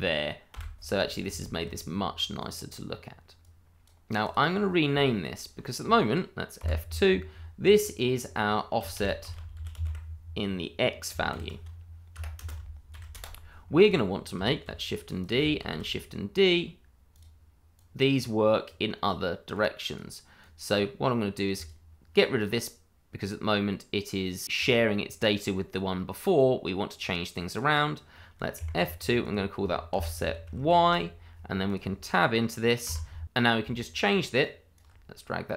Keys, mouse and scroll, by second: 0.5 Delete, 1.0 scroll down 1, 1.5 shift+middle click, 2.4 click, 4.5 scroll up 1, 5.0 shift+middle click, 6.6 F2, 8.9-9.8 typing, 11.3 shift+x, 12.1 BackSpace, 12.4 space, 12.9 shift+x, 13.1 Return, 13.8 click, 15.2 click, 15.6 shift+d, 17.1 click, 18.1 click, 24.5 click, 27.8 double click, 28.5 F2, 29.2 click, 29.9 BackSpace, 30.3 shift+y, 30.8 Return, 31.6 click, 32.8 Tab, 34.4 ctrl+right click.